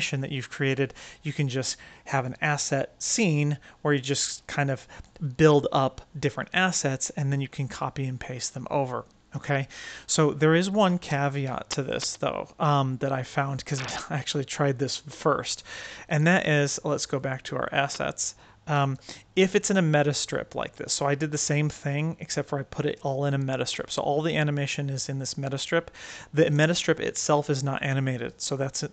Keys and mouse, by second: 11.4-12.2 middle drag, 14.7 click, 18.6 middle drag, 19.3 click, 20.3-21.9 right drag, 23.7-25.5 right drag, 26.2 click.